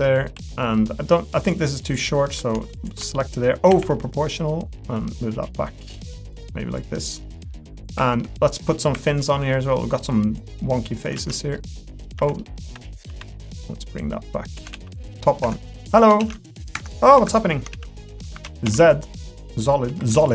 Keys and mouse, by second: 0.0 middle click, 0.3 3, 0.5 middle click, 1.4 click, 2.7 shift+click, 3.7 o, 4.4-5.9 drag, 6.8 click, 7.5 middle click, 8.0 3, 8.2 middle click, 8.9 2, 9.2 click, 10.4 click, 11.2 ctrl+z, 11.3 middle click, 12.1 o, 12.4 middle click, 12.7 1, 13.5 click, 14.0 click, 14.7 z, 15.5 Escape, 16.2 ctrl+z, 16.7 Escape, 17.7 ctrl+z, 18.6 z, 19.7 2.